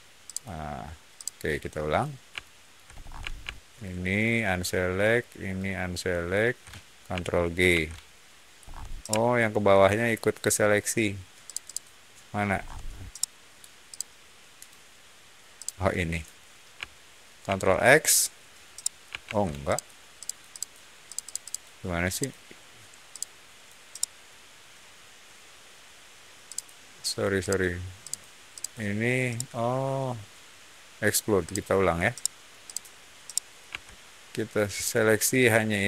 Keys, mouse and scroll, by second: 0.2 shift+click, 1.1 shift+click, 2.3-2.6 shift+middle drag, 2.8 scroll up 1, 3.7-4.1 ctrl+shift+drag, 5.4-6.0 ctrl+shift+drag, 7.6 ctrl+g, 8.5 scroll down 1, 8.9-9.5 shift+middle drag, 11.4 shift+click, 11.6 shift+click, 12.4 scroll down 1, 13.0-13.4 shift+middle drag, 13.8 shift+click, 15.5 shift+click, 17.4 ctrl+x, 18.7 middle click, 19.2 ctrl+z, 19.6 click, 20.1 click, 20.4 click, 21.0 click, 21.2 click, 21.3 click, 22.0 click, 23.0 click, 23.8-24.1 middle drag, 26.4 click, 27.3 click, 27.9 click, 28.4 click, 29.2-30.5 right drag, 31.4 click, 31.5 ctrl+z, 32.0 middle drag, 32.6 click, 33.2 middle drag, 33.6 x, 34.7-35.8 drag.